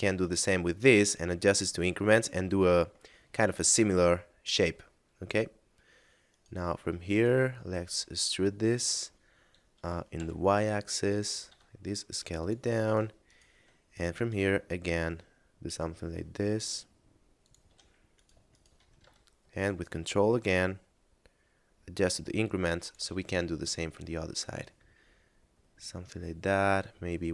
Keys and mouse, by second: 1.6 ctrl+click, 2.6 a, 3.3 middle click, 6.3 right click, 7.1 shift+right click, 7.8 e, 10.8 click, 11.4 s, 12.2 click, 12.8 right click, 13.2 shift+right click, 13.7 e, 17.2 ctrl+click, 18.2 right click, 18.5 shift+right click, 18.9 e, 22.6 ctrl+click, 23.1 a, 23.6 middle click.